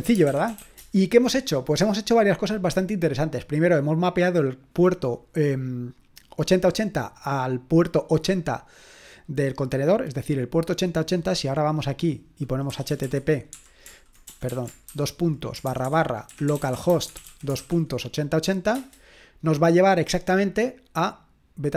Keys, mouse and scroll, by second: 0.0-1.1 typing, 11.5-12.7 drag, 12.5-18.7 typing.